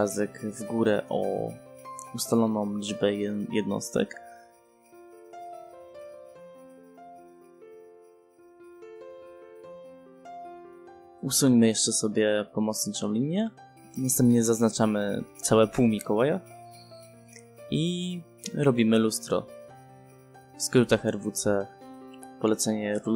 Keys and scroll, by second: 2.7 5, 3.5 0, 5.1 space, 9.4 r, 9.6 e, 9.7 space, 13.9 e, 14.0 space, 21.9 w, 22.5 space.